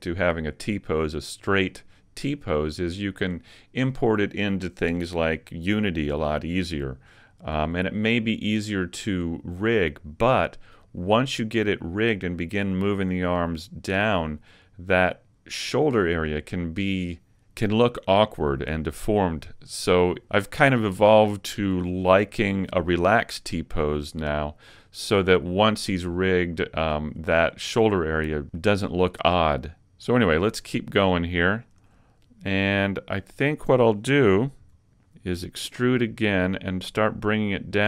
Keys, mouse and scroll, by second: 30.2-30.8 scroll up 3, 30.7 shift+middle click, 31.3-31.7 scroll up 1, 31.7 shift+middle click, 32.6 middle click, 34.6 KP_1, 35.5 e.